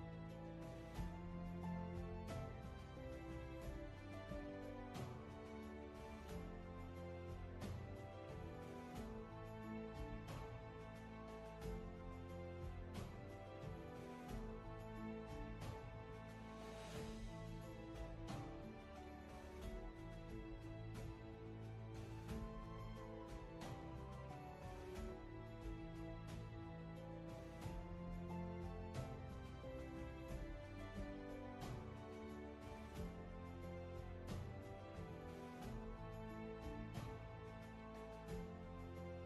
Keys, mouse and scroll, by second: 10.0 ctrl+z, 17.3 ctrl+z, 22.2 ctrl+z, 34.3 ctrl+z.